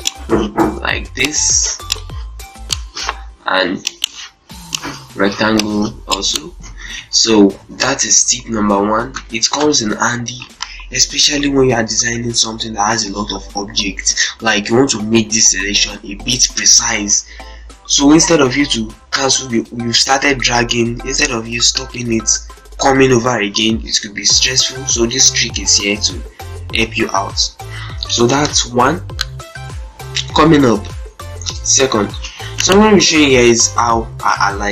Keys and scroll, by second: 6.4 ctrl+space, 7.0 ctrl+a, 7.4 ctrl+c, 7.5 ctrl+e, 8.3 shift+F2, 8.9 p, 9.3 Delete, 31.7 shift+F4.